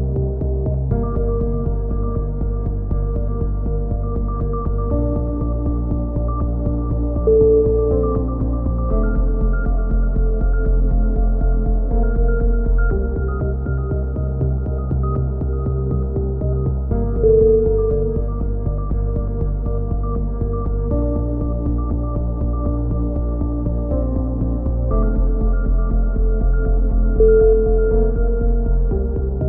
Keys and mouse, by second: 1.3 z, 1.6 click, 3.4-5.2 drag, 3.9 right click, 4.4 right click, 5.2 middle click, 5.4-7.7 typing, 6.7 middle click, 7.7 middle click, 8.0 click, 9.3 KP_3, 9.8 z, 10.3 click, 11.8-13.2 right drag, 13.7-14.9 drag, 15.0 click, 17.7-19.0 right drag, 19.0 middle click, 19.2 click, 20.1 a, 20.2 z, 20.4 middle click, 20.7 click, 23.0-25.1 typing, 23.4-24.6 middle drag, 25.3 middle click, 27.2-29.4 typing, 28.9 click.